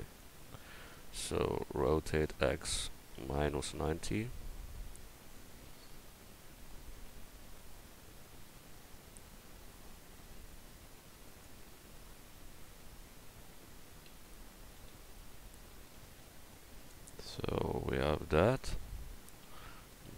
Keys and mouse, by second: 1.9 r, 14.1 r.